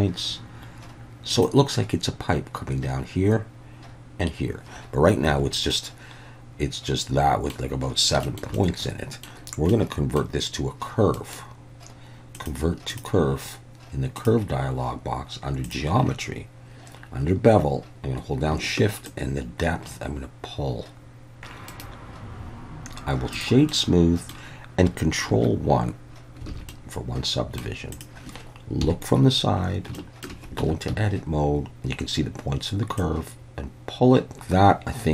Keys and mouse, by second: 1.3 click, 5.3 Tab, 5.7-7.5 middle drag, 8.3 shift+middle drag, 8.6-9.3 middle drag, 9.7-10.2 middle drag, 11.2-13.1 right drag, 15.7 click, 19.1-21.4 shift+drag, 21.7 right click, 21.8-23.4 drag, 23.7-24.3 middle drag, 25.3 ctrl+1, 26.5 alt+a, 26.7-27.6 middle drag, 28.0 click, 28.8 KP_3, 30.0-30.3 shift+middle drag, 30.6 Tab, 30.9 a, 33.0-34.7 drag, 34.7-35.1 middle drag.